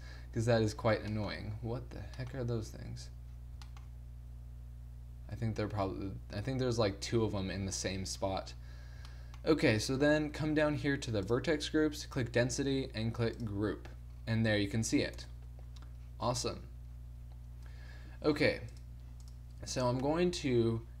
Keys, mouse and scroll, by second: 2.4 middle click, 7.6-9.2 middle drag, 9.7 t, 11.4-12.9 drag, 14.1-15.2 middle drag, 15.2 KP_0, 15.3 middle click, 17.8 Tab, 18.4 Tab.